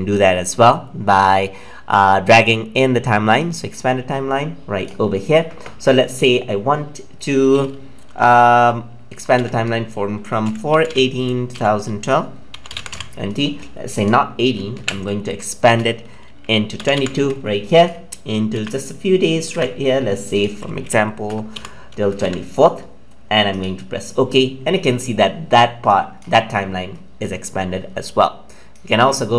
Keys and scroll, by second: 18.5 ctrl+c, 23.3 ctrl+v.